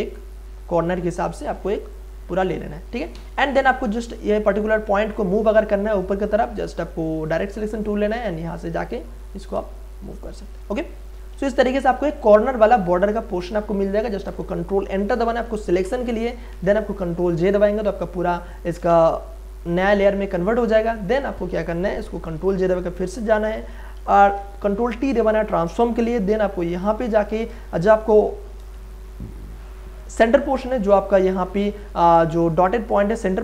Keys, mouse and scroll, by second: 1.6 space, 1.9 click, 2.1 space, 3.1 a, 6.3 right click, 7.3-9.5 drag, 9.5 click, 10.7 shift+space, 10.9 click, 11.2 space, 11.5 ctrl+click, 12.2 ctrl+click, 15.7 ctrl+Return, 17.3 ctrl+j, 18.5 click, 21.0 click, 22.4 ctrl+j, 23.9 ctrl+t, 25.7 ctrl+space, 26.0 ctrl+click, 26.3 ctrl+space, 26.8 click, 27.2 ctrl+space, 28.9-30.9 ctrl+drag, 31.3 click, 32.6 space, 32.9 click, 33.1 space.